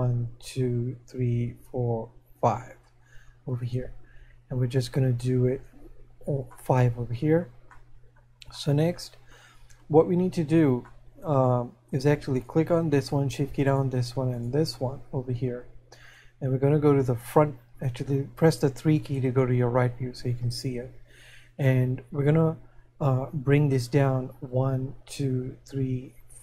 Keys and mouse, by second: 6.6 middle click, 8.0 middle click, 24.5 click.